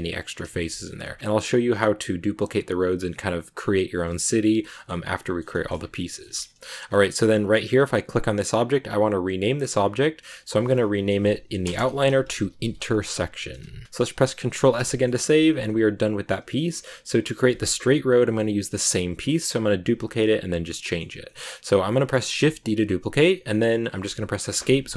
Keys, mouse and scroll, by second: 0.0 scroll up 1, 0.2 scroll down 3, 0.4 shift+middle click, 0.9 scroll down 5, 1.2-2.9 middle drag, 3.9-5.7 shift+middle drag, 5.7-7.1 scroll up 5, 5.9 middle click, 6.2 shift+middle click, 7.1 scroll down 5, 7.6 right click, 9.6 click, 9.7-11.7 drag, 11.7 BackSpace, 13.8 middle click, 14.4 ctrl+s, 14.8-22.3 shift+middle drag, 22.3 shift+d.